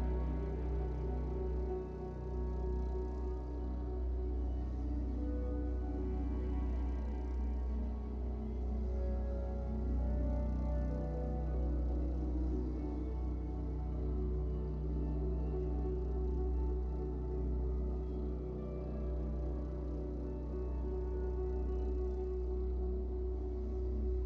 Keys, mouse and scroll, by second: 0.0 g, 1.1 shift+middle drag, 1.3-3.4 scroll up 6, 1.7 shift+middle click, 3.4 scroll down 1, 3.7-5.7 shift+middle drag, 5.2 KP_3, 5.7 g, 6.5-7.1 shift+middle drag, 7.1-8.3 scroll down 2, 8.3-9.9 drag, 8.3 scroll down 1, 10.2-11.6 shift+middle drag, 11.6-14.4 drag, 14.4-16.8 typing, 21.7 click, 22.3 KP_0, 23.1 click.